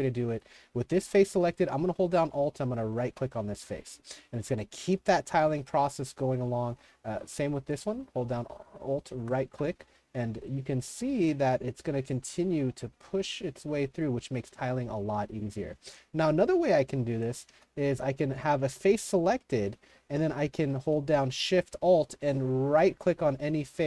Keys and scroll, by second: 6.8 w, 7.5 s, 14.6-17.5 typing, 18.7-21.4 typing.